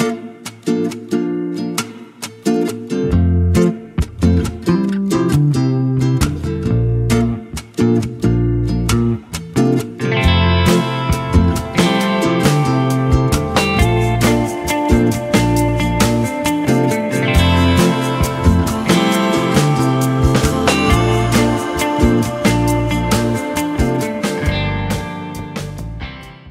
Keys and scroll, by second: 13.9 ctrl+z, 18.6 ctrl+z.